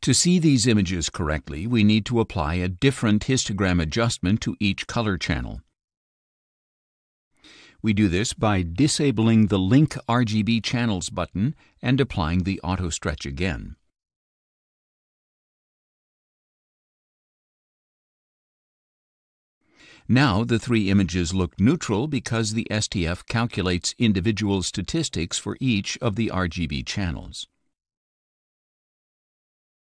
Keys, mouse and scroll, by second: 1.2 click, 4.8 click, 5.3 click, 9.8 click, 12.5 click, 14.8 click, 16.5 click, 18.2 click, 19.9 click, 28.4 scroll down 2.